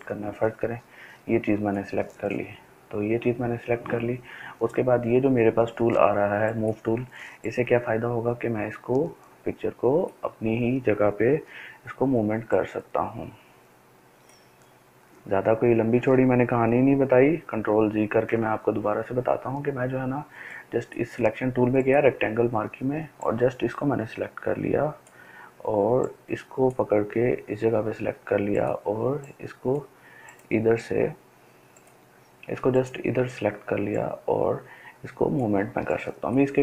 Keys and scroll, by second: 17.1 ctrl+alt+z, 18.0 ctrl+alt+z.